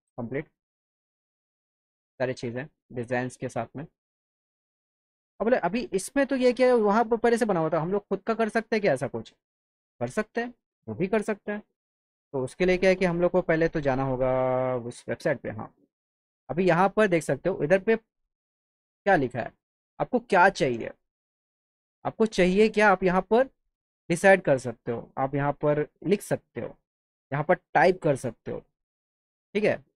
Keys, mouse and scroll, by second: 3.5-5.2 alt+middle drag, 5.6 alt+middle click, 8.8 click, 13.9 click, 15.1 click, 16.6 click, 18.5 click, 26.1 click, 27.2 click.